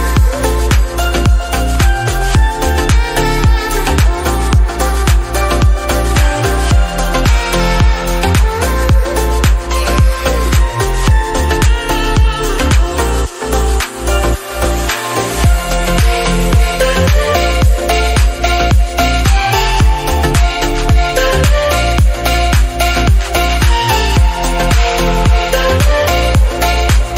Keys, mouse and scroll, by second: 0.0 alt+r, 0.6 middle click, 0.6 click, 2.2 t, 2.5 t, 2.9 t, 2.9 r, 3.7 middle click, 4.4 KP_0, 5.0-5.5 scroll up 2, 5.8 scroll up 1, 5.8 click, 6.6 click, 8.5 click, 9.0 click, 9.9 click, 10.2 click, 10.3 g, 12.3-15.6 drag, 16.5 click, 18.8 g, 20.7 shift+click, 21.6 ctrl+p, 21.8 click, 22.0 click, 22.3 g, 23.2-24.2 scroll up 3, 24.2 r, 26.1-27.1 drag.